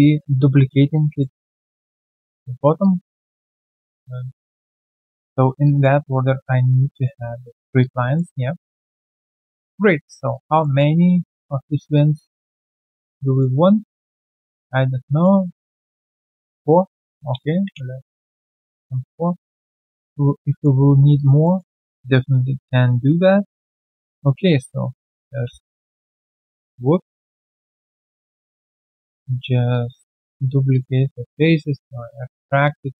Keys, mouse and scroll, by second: 1.1 alt+middle click, 2.0 alt+middle click, 2.7 alt+middle click, 3.2 alt+click, 3.6 alt+middle click, 4.7 alt+right click, 5.0 alt+middle click, 5.3 alt+right click, 5.6 alt+click, 6.2 right click, 6.2 q, 6.6 alt+scroll down 1, 6.9 alt+click, 7.3 alt+middle click, 7.5 alt+right click, 7.7 alt+click, 8.1 alt+middle click, 8.5 alt+click, 8.9 right click, 9.7 scroll down 1, 10.0 alt+middle click, 10.3 alt+click, 10.6 alt+middle click, 10.8 alt+scroll down 2, 11.9 right click, 11.9-13.0 scroll down 1, 13.0 right click, 16.8 alt+middle click, 17.6 Delete, 18.3 right click, 18.9 alt+middle click, 20.8 alt+right click, 21.1 alt+click, 21.4 alt+middle click, 25.4 ctrl+d, 26.9 ctrl+z, 28.0 ctrl+alt+d, 28.6 w, 29.0 alt+click, 29.6 w, 29.7 alt+click, 30.2 alt+middle click, 30.5 alt+right click, 30.7 alt+click, 31.0 alt+middle click.